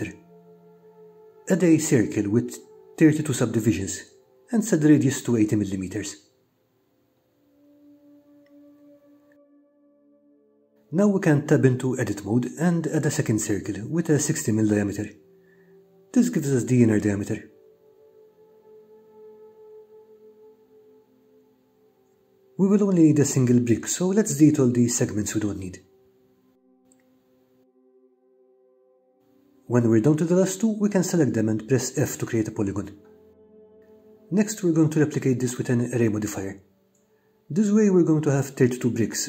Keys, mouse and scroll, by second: 2.4 click, 4.3-8.4 drag, 11.0 Tab, 14.5 shift+a, 18.4-22.2 drag, 25.0 KP_Enter, 26.1 click, 26.8 Delete, 27.5 click, 27.7 Delete, 28.1 click, 28.8 click, 29.0 Delete, 29.4 click, 32.7 f, 34.4 Tab, 39.1 click.